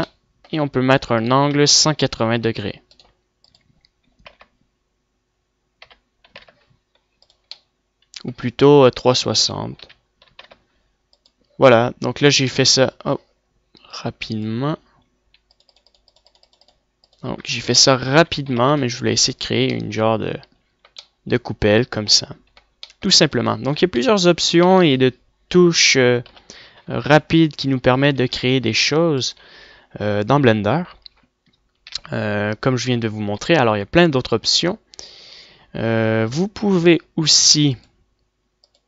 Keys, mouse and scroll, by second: 0.1 middle click, 0.6 middle click, 7.7-9.3 middle drag, 9.3-11.1 drag, 12.7 middle click, 14.1-15.9 drag, 20.4 middle click, 22.5 middle click, 23.5 right click, 24.0 click, 24.2 l, 24.7 x, 25.1 click, 26.4 KP_1, 26.9-28.2 middle drag, 28.0 a, 28.2 a, 30.5 a, 31.1 Tab, 31.9 Tab, 35.8 Tab.